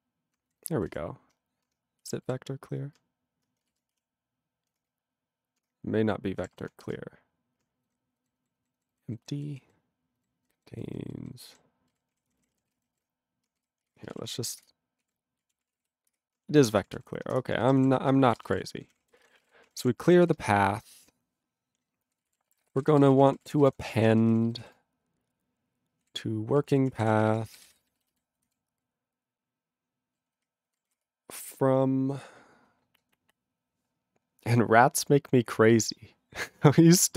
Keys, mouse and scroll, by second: 0.6 ctrl+n, 0.6 ctrl+n, 0.9 ctrl+g, 1.7 BackSpace, 2.2 c, 2.7 t, 3.9-7.7 typing, 7.9 ctrl+n, 8.2 ctrl+n, 8.4 ctrl+n, 8.6 ctrl+n, 8.8 ctrl+n, 9.1 ctrl+n, 9.2 ctrl+n, 9.4 ctrl+n, 9.5 ctrl+n, 9.7 ctrl+n, 10.2 ctrl+n, 10.6 ctrl+n, 10.7 ctrl+n, 11.0 ctrl+n, 11.2 ctrl+n, 11.3 ctrl+n, 11.5 ctrl+n, 11.9 ctrl+g, 12.1 ctrl+a, 12.3 ctrl+k, 12.4 ctrl+k, 12.7 ctrl+s, 13.7 ctrl+g, 15.0 ctrl+s, 15.2-16.3 typing, 16.6 ctrl+=, 16.8 ctrl+s, 17.4 Return, 17.9 Return, 18.3 ctrl+a, 18.4 ctrl+space, 18.4 ctrl+e, 18.5 ctrl+g, 18.7 ctrl+p, 18.9 ctrl+p, 19.0 ctrl+a, 19.1 ctrl+space, 19.2 ctrl+e, 19.3 ctrl+n, 19.3 ctrl+e, 19.4 ctrl+g, 19.6 ctrl+a, 19.7 ctrl+o, 19.8 Tab, 20.3 ctrl+s, 22.1-24.4 typing, 24.3 ctrl+e, 24.6 ctrl+b, 31.5 space.